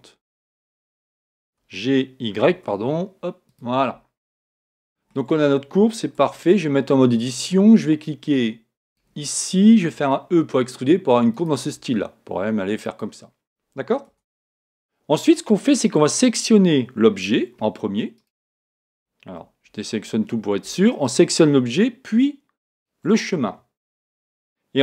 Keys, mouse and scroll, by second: 3.5 click, 4.5-6.2 middle drag, 6.2 Tab, 8.8-10.8 right drag, 9.9 e, 11.4-14.6 drag, 11.7 e, 14.1 Tab, 18.1-20.1 right drag, 19.4 a, 21.0-24.6 right drag.